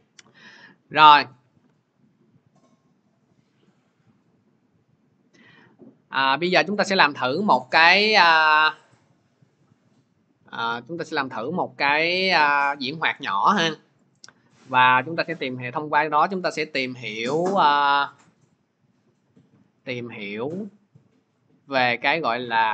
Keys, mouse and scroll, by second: 7.5 click, 11.1 Delete, 14.0 click, 14.2 click, 16.5 click, 17.0-17.7 scroll, 21.4 click.